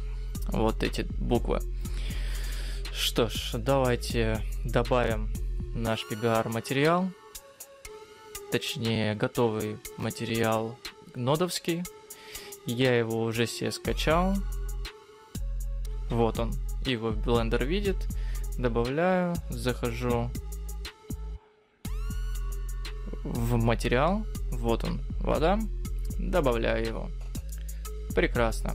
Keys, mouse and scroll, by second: 5.7 click.